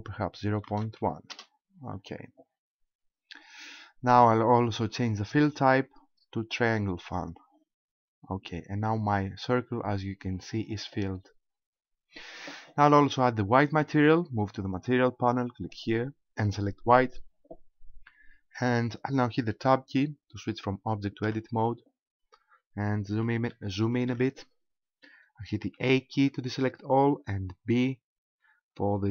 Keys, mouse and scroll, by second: 5.3 click, 8.0-10.0 scroll up 3, 10.1-10.4 scroll up 4, 11.4-12.0 scroll down 4, 14.6 click, 15.7 click, 18.0-20.0 scroll up 5, 21.2 Tab, 22.1 scroll up 3, 23.5 shift+middle click, 25.7 a, 27.6 b.